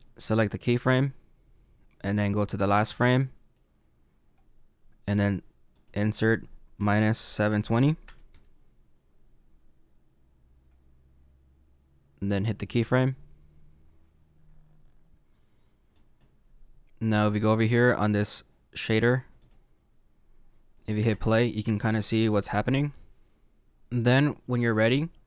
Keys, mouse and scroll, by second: 0.8 click, 2.6 click, 8.3 click, 12.6 click, 15.9 click, 19.4 click, 21.1 space, 23.8-25.2 scroll down 2.